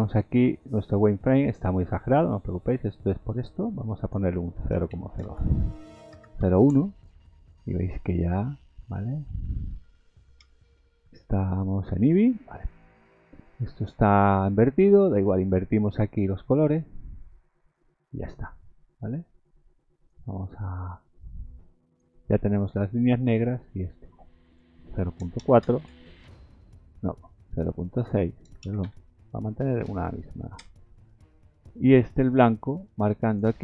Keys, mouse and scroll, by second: 0.7 scroll down 1, 1.5-2.1 scroll down 2, 2.1 middle click, 2.7-3.5 scroll up 7, 4.1 click, 8.0 scroll down 2, 8.7 middle click, 9.7-10.1 scroll down 2, 10.4 KP_0, 12.2-12.6 scroll up 2, 13.4-14.2 scroll down 9, 15.3-15.8 scroll up 6, 16.8 click, 20.9 click, 24.4 click, 27.8 click, 33.2 click.